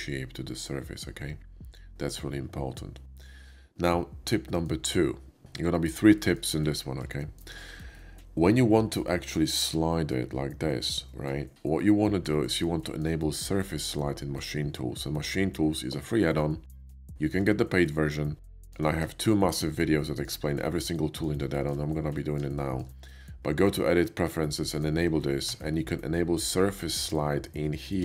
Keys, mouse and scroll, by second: 0.5-3.7 middle drag, 3.8 middle click, 6.1 shift+middle click, 7.0 shift+middle click, 7.7-8.8 shift+middle drag, 9.3 s, 11.8 middle click, 12.8 shift+middle click, 16.1 middle click, 17.0 shift+middle drag, 18.3 shift+middle drag, 19.0-19.4 shift+middle drag, 19.9 shift+middle drag, 20.8-21.2 shift+middle drag, 21.5 shift+middle drag, 22.1 shift+middle drag, 22.6 shift+middle click, 24.3 shift+middle click, 25.4 Tab, 27.8 Tab.